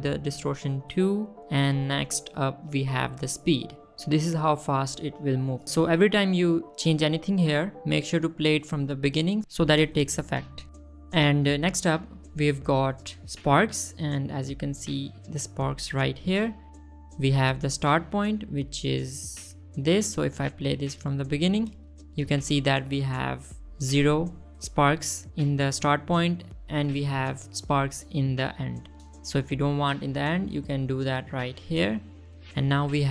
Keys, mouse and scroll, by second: 0.6-2.1 shift+drag, 3.7 shift+click, 5.1 shift+click, 6.2 middle click, 6.4 shift+middle click, 6.6 middle click, 6.7 scroll down 1, 8.9 click, 9.2 space, 9.4-9.9 scroll down 2, 9.9-10.6 scroll up 1, 10.6 space, 10.8 shift+middle drag, 11.1-11.5 middle drag, 11.6 shift+middle click, 13.3 click, 14.3 click, 14.8 shift+middle drag, 15.0-15.4 shift+scroll up 3, 15.4-16.0 middle drag, 17.5 click, 19.4 click, 20.4 scroll down 2, 20.8-21.3 scroll up 2, 21.9 click, 22.3 space, 22.8 space, 27.2-27.6 middle drag, 27.7 scroll down 2, 28.0 shift+middle drag, 28.5 middle click, 28.8-29.6 scroll up 2, 29.6 scroll down 1, 30.7 click, 32.3 click, 32.6 space.